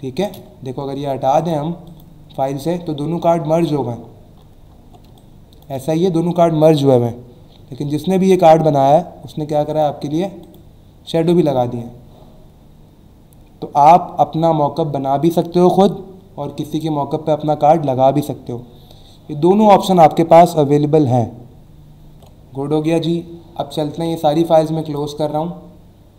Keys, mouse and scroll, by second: 0.8 alt+scroll up 1, 1.4 click, 1.8 click, 2.9-3.4 alt+scroll down 2, 4.0 alt+scroll down 1, 5.1 space, 5.2 click, 5.6 space, 9.7 click, 10.4 click, 22.1 ctrl+Num_Lock, 23.9 ctrl+w, 24.5 click.